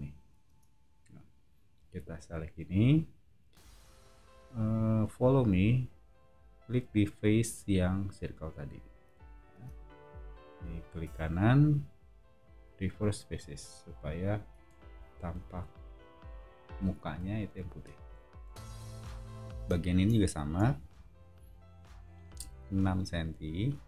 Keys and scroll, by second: 0.4 space, 9.5 space, 14.5 o, 19.5 space, 20.5 l.